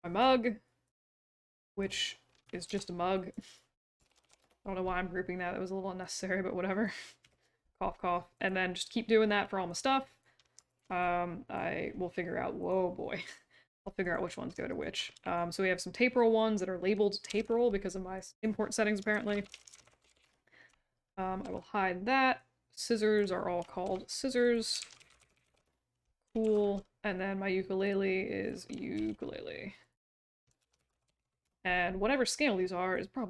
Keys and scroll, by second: 2.6 ctrl+g, 3.8-4.7 typing, 17.2 ctrl+g, 18.8-20.6 typing, 21.4 ctrl+h, 23.8 ctrl+g, 24.6-25.9 typing, 26.4 ctrl+h, 28.9 ctrl+g, 30.3-31.7 typing.